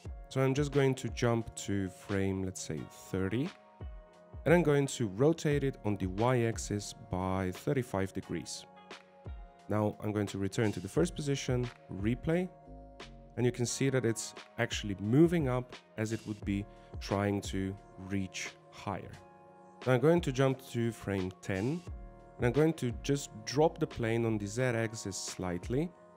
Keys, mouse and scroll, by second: 1.4 scroll up 2, 3.4 click, 6.4 r, 11.1 click, 13.7 alt+a, 14.9 scroll down 1, 15.2 middle click, 19.7 alt+a, 19.7 click, 21.6 click, 24.9 g.